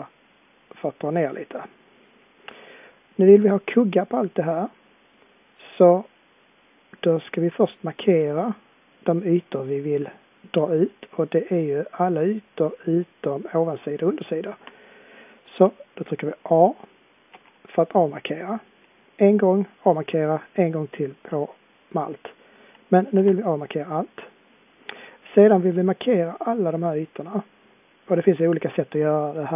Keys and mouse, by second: 17.3 a, 20.1 a, 23.2 a.